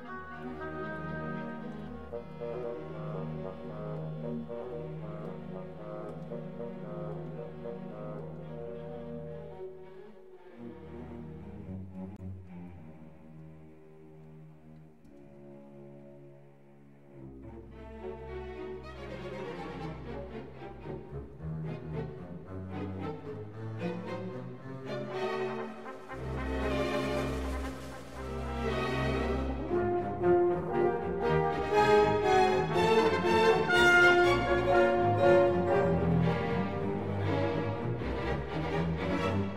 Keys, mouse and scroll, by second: 0.0-3.4 typing, 0.2 click, 0.3 click, 0.4 Tab, 0.9 Tab, 2.8 right click, 4.7-8.5 typing, 4.9 right click, 5.6 right click, 6.0 right click, 6.5 alt+h, 7.4 right click, 8.4 alt+h, 8.7 ctrl+s, 9.1 ctrl+s, 10.2 shift+b, 12.4-19.9 typing, 12.6 right click, 12.9 Tab, 13.2 right click, 14.2 ctrl+Tab, 14.9 alt+h, 15.7 Tab, 16.0 Tab, 16.3 middle click, 16.5 right click, 16.6 Tab, 18.0 right click, 19.2 alt+h, 19.6 right click, 20.3 ctrl+s, 20.5 ctrl+s, 21.1 ctrl+s, 22.1 click, 22.3-23.9 middle drag.